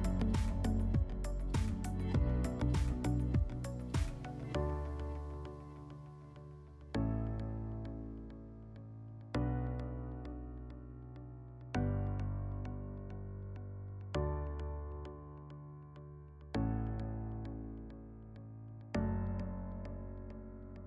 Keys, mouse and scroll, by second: 1.7-2.0 scroll, 4.6 click, 7.4 click, 9.3 ctrl+d, 10.6-11.8 drag, 12.3 ctrl+d, 15.3 click, 17.3 click, 19.5 click, 20.7 click.